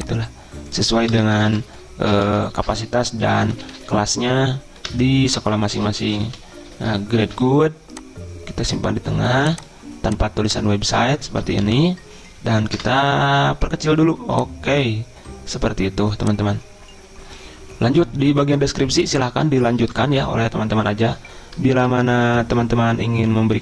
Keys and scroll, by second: 1.2 BackSpace, 2.3 ctrl+shift+Right, 3.1-4.4 typing, 4.9 Return, 5.8-7.0 typing, 7.3 ctrl+a, 11.7 Delete, 12.8 BackSpace.